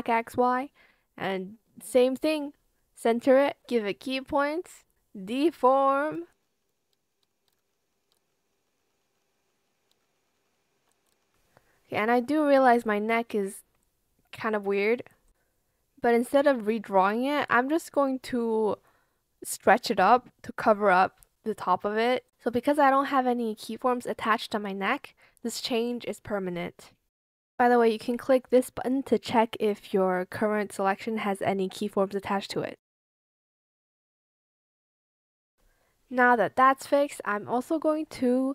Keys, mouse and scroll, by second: 0.0-0.7 typing, 1.9 ctrl+shift+click, 5.9 shift+click, 6.1 ctrl+z, 6.8 shift+click, 7.1 shift+click, 7.6 ctrl+z, 8.3 ctrl+z, 9.6 shift+click, 10.8 ctrl+z, 12.2 ctrl+shift+z, 19.9 ctrl+z, 20.7 shift+click, 22.0 shift+click, 23.5 shift+click, 25.8 shift+click, 28.8 shift+click, 30.0 Escape.